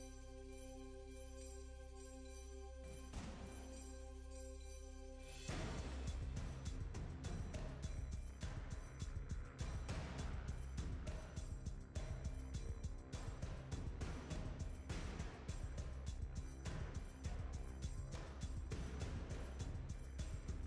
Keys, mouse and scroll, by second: 0.5 shift+middle click, 0.7 scroll up 3, 0.9 s, 1.8 g, 2.2 Tab, 2.4 middle click, 2.7 Tab, 2.9 middle click, 3.1 scroll up 1, 3.2 Tab, 3.4 middle click, 3.5 Tab, 3.7 click, 4.6 shift+click, 4.7 shift+click, 5.1 a, 5.2 s, 5.9 g, 6.5 Tab, 6.8 Tab, 6.9 s, 7.4 Tab, 7.6 scroll down 1, 7.7-8.2 middle drag, 8.2 scroll up 1, 8.3 Tab, 8.4 click, 9.3-11.7 typing, 9.6 scroll down 3, 11.0-11.3 scroll up 3, 12.0 Tab, 12.1 scroll down 1, 12.3 middle click, 12.5 Tab, 12.7 shift+click, 13.0-14.8 typing, 13.4 scroll down 2, 14.1 scroll up 2, 15.2 Tab, 15.4 Tab, 15.5 scroll down 2, 15.6 middle click, 15.8 scroll up 3, 16.0 click, 16.6 scroll down 2, 16.7 middle click, 17.1 shift+click, 17.4 u, 17.8 scroll down 2, 18.0 a, 18.1 s, 18.5 scroll up 1, 18.7 g, 20.3 Tab, 20.5 scroll down 2.